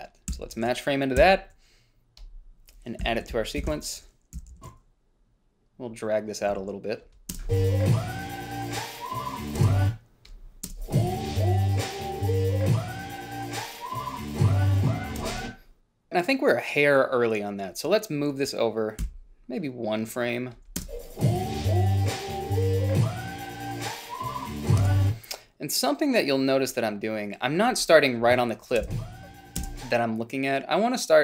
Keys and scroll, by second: 0.6 f, 1.5 i, 3.4-5.3 typing, 3.5 Down, 3.9 Left, 6.8 a, 7.6 space, 9.9 space, 11.0 space, 15.6 space, 19.4 ,, 21.1 space, 25.1 space, 29.1 space, 29.9 space.